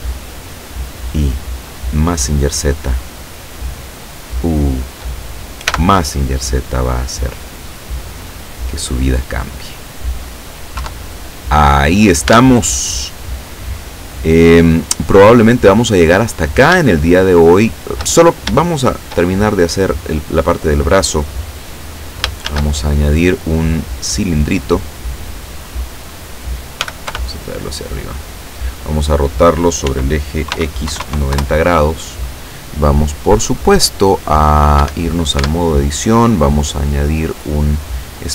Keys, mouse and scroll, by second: 0.2 shift+right click, 0.8 shift+right click, 1.2 shift+right click, 1.8 shift+right click, 2.3 shift+right click, 3.7 shift+right click, 4.5 shift+right click, 5.8 x, 7.4 click, 8.6-9.8 middle drag, 10.8 KP_7, 12.4 Tab, 13.4-13.8 scroll down 2, 14.0-14.6 scroll up 2, 15.7-16.0 scroll down 2, 16.2-16.6 scroll down 2, 17.0-18.2 shift+middle drag, 18.2-18.6 shift+scroll up 2, 18.6 shift+middle click, 22.5 shift+a, 24.9 click, 26.9 g, 27.2 y, 28.2 click, 29.9 r, 30.6 x, 30.9 KP_9, 31.1 KP_0, 31.4 KP_Enter, 33.8 click, 34.8 Escape, 35.4 Tab, 36.3 click, 37.6 click.